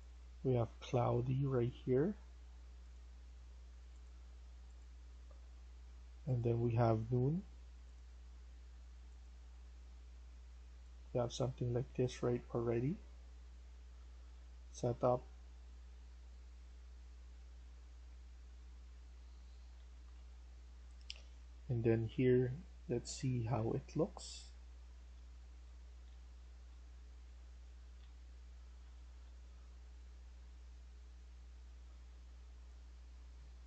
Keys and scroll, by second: 18.5-23.9 typing, 24.9-31.3 typing.